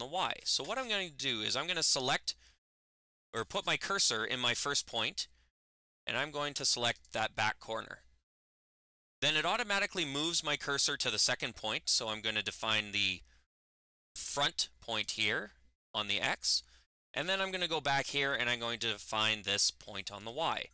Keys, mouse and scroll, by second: 3.4 click, 6.8 click, 14.8-20.1 drag.